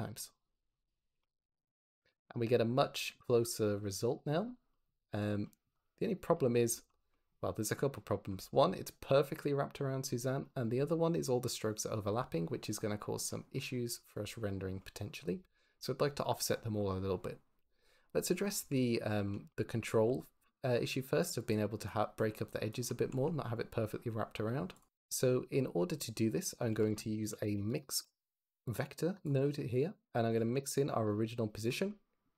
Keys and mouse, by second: 0.3 click, 4.6 click, 5.3 click, 6.5 shift+middle drag, 12.2 click, 17.4 z, 19.9-22.7 d, 20.8 click, 21.4 click, 22.0 click, 22.4 click, 23.0 z, 26.6 shift+a, 30.1 shift+click, 30.3 shift+d, 30.7 click, 31.0 click.